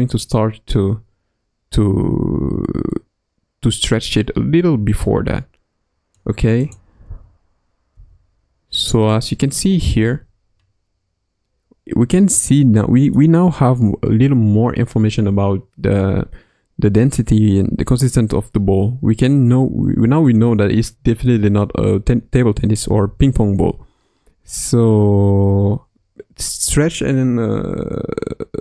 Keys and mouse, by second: 6.6 click, 7.0 space, 7.9 space, 9.8 space, 12.1-22.8 middle drag, 22.8 space.